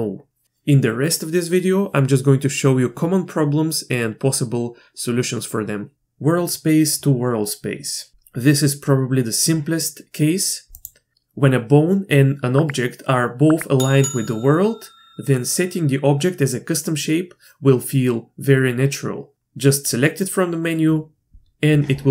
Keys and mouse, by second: 11.1 click.